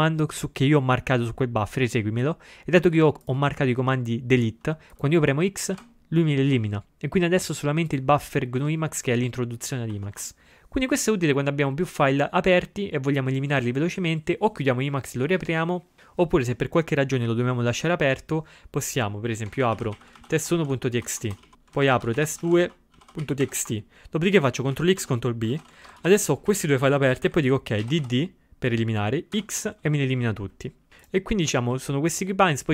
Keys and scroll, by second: 5.8 x, 8.6 ctrl+a, 19.6 ctrl+x, 19.8 ctrl+f, 20.0-22.0 typing, 24.8 ctrl+x, 25.0 ctrl+b, 27.1 Down, 27.3 Up, 27.9 d, 28.1 d, 29.4 x.